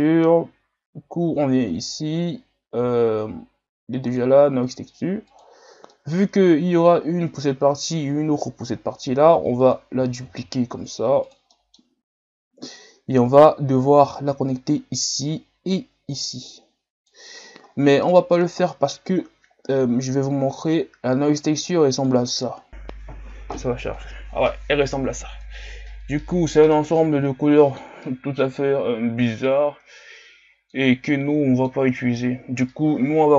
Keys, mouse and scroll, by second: 10.3 shift+d, 15.2 click, 17.1 click, 20.7-22.2 drag, 24.9 scroll down 2, 25.5-33.3 middle drag.